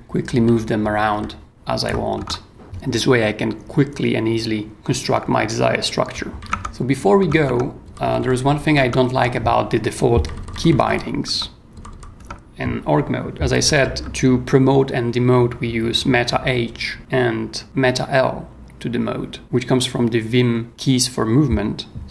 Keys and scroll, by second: 0.3 super+Down, 0.8 super+Up, 1.5 super+Down, 2.2 super+Tab, 6.4 k, 6.5 Tab, 7.3 j, 7.4 Tab, 7.8 j, 8.8 Tab, 9.1 j, 11.2 Tab, 11.7 j, 12.2 Tab, 13.1-13.9 typing.